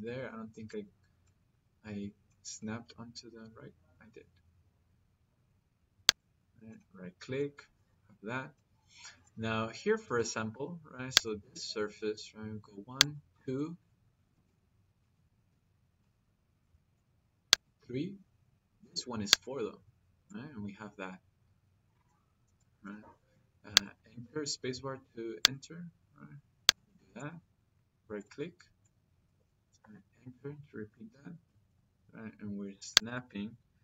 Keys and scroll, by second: 9.8 –, 22.7 -, 29.6 -.